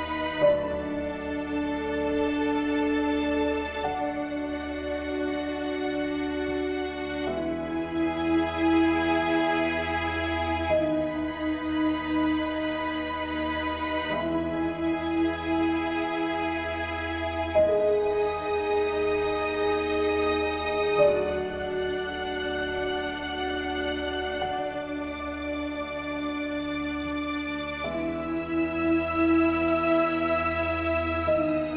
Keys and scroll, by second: 8.5 ctrl+;.